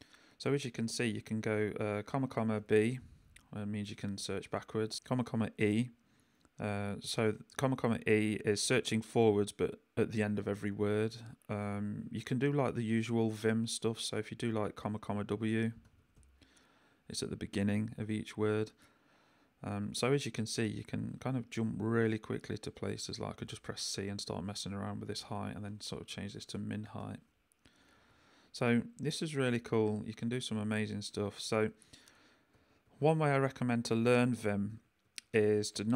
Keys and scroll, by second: 0.3 j, 2.1 ,, 2.6 b, 4.4 Escape, 11.6 Escape, 15.8 ,, 16.1 w, 23.4 c, 25.7-27.9 typing, 27.7 Escape, 29.5 Escape, 29.8 u, 31.2 j, 32.1 k, 34.3 j, 35.0 k.